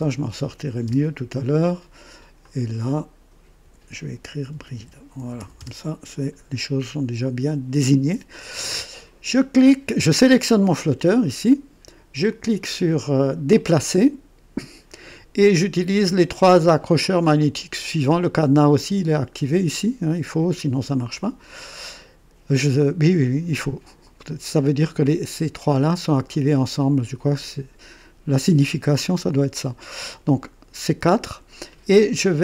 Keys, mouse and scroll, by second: 0.0-0.8 typing, 2.4 click, 3.6-5.8 typing, 7.5 click, 7.5-7.9 typing, 9.7 typing, 13.5 click.